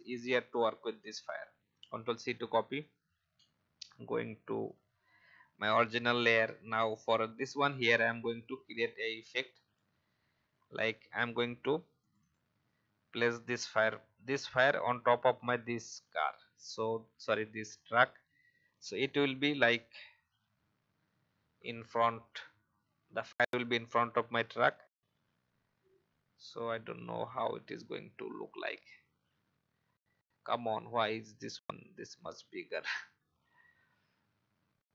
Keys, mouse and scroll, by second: 2.7 click, 7.2-8.3 alt+scroll up 1, 12.0 click, 28.2-32.1 alt+scroll down 1, 33.9 alt+scroll down 1.